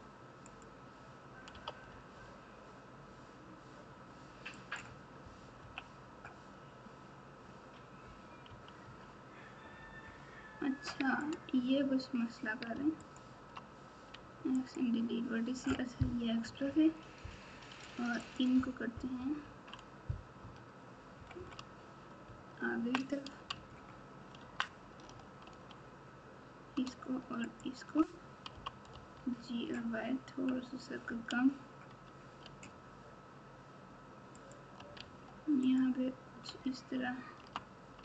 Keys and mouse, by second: 1.5 g, 5.6 KP_1, 8.4 KP_6, 8.8 KP_6, 11.2 click, 13.0 ctrl+click, 14.1 x, 16.4 KP_4, 16.6 KP_4, 18.2 click, 19.1 KP_6, 19.4 KP_6, 19.6 KP_6, 20.4 KP_4, 21.1 KP_Subtract, 21.3 KP_Subtract, 22.2 ctrl+KP_4, 22.7 ctrl+KP_4, 23.5 Tab, 24.4 Tab, 25.4 alt+z, 27.5 shift+click, 34.9 alt+z, 35.6 click, 36.4 Tab, 37.3 Tab.